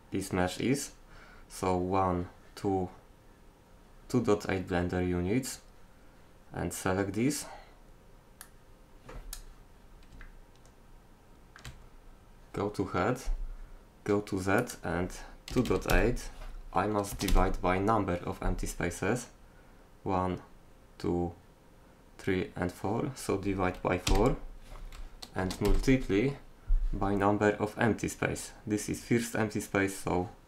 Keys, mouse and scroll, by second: 8.4 click, 9.1-10.2 drag, 10.2-14.6 middle drag, 14.6-16.3 drag.